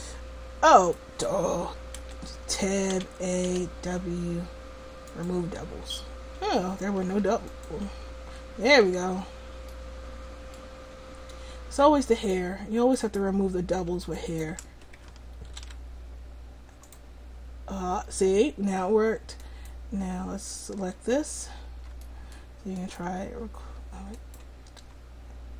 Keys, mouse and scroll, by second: 0.8-2.1 drag, 2.1 Tab, 3.0 a, 3.5 w, 7.1 w, 9.0 Tab, 12.2-15.5 right drag, 15.5 ctrl+p, 19.5-22.1 right drag, 22.1 middle click.